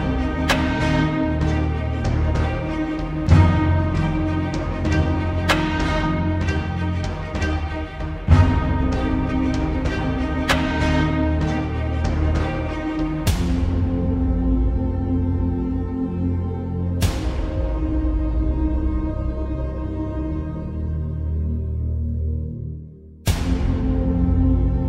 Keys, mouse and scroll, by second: 6.8 Return, 8.6-8.9 alt+scroll down 1, 9.0 space, 9.2 click, 10.6-11.5 shift+click, 12.4-13.4 shift+click, 13.9 Return, 14.8-15.2 alt+scroll up 1, 15.2 space, 15.4-16.3 click, 15.7 space, 17.8 click, 18.7 space, 19.2 alt+scroll down 1, 19.6 alt+scroll up 1, 19.7 space, 19.8 click, 20.5 right click, 21.5 click, 21.7 space, 22.0 click, 22.2-22.9 space, 23.5 click.